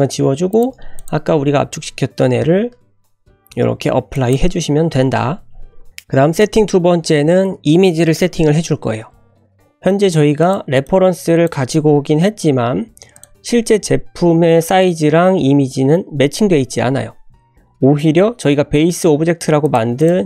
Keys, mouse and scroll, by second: 0.2 Delete, 0.5 click, 1.0 click, 2.4 ctrl+a, 5.9 shift+middle click, 5.9 scroll down 1, 10.4 click, 10.8-11.4 drag, 13.1 click, 17.6 click, 18.3-20.2 scroll up 1.